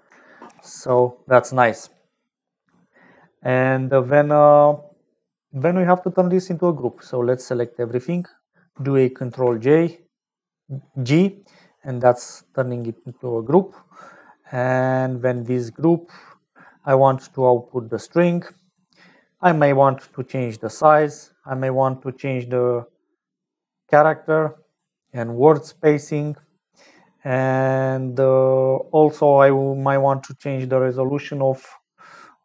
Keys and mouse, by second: 6.9 click, 9.6 ctrl+g, 11.3 click, 12.2 click, 13.3 click, 14.2 click, 14.8 click, 17.5 click, 18.5 click, 19.4-20.8 drag, 22.2-24.9 drag, 25.7 click.